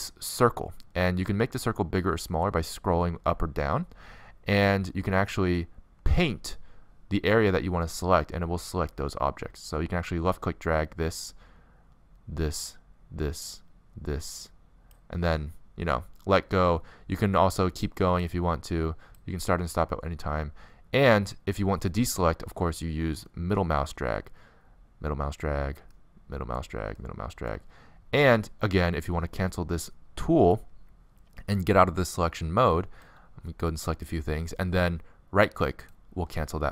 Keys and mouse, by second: 35.4-36.7 right drag.